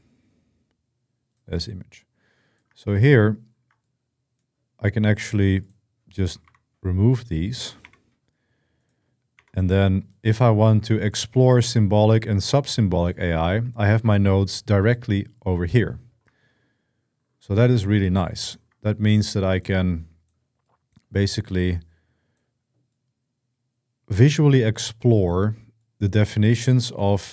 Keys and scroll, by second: 6.2 \, 7.6 BackSpace, 9.1 BackSpace.